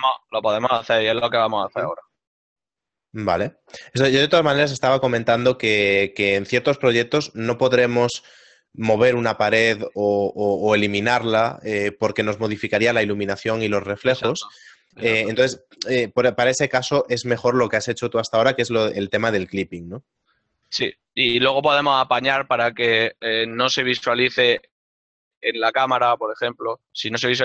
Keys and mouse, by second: 1.0 click, 2.3 middle click, 4.3 Tab, 5.2 click, 5.7 right click, 6.3 shift+right click, 7.8 g, 10.7 KP_0, 12.8 ctrl+middle click, 16.5 middle click, 20.5 click, 21.0 right click, 22.8 right click.